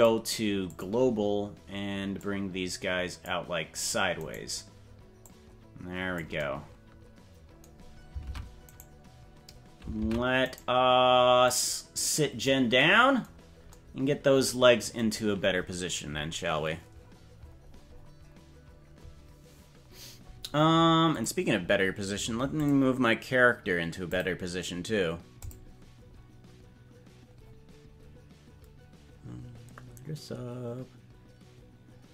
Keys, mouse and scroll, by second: 2.1-3.3 drag, 4.3 right click, 5.2 click, 8.2 ctrl+Tab, 8.8 right click, 10.0 ctrl+Tab, 10.6 right click, 11.4-12.5 drag.